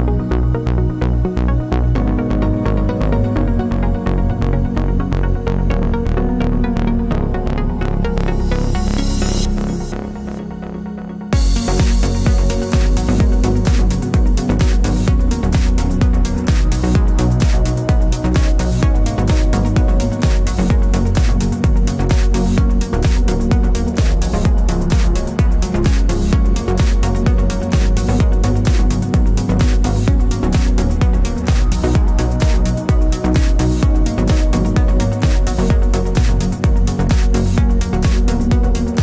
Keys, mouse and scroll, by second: 2.2-6.2 drag, 2.9 KP_0, 3.0 KP_Enter, 6.2 shift+d, 7.9 r, 30.1-39.0 drag, 30.1 shift+d.